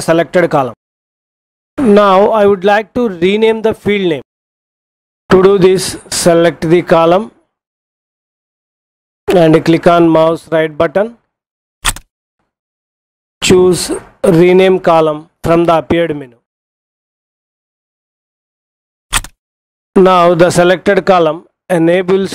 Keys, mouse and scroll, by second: 11.6 right click, 18.9 click.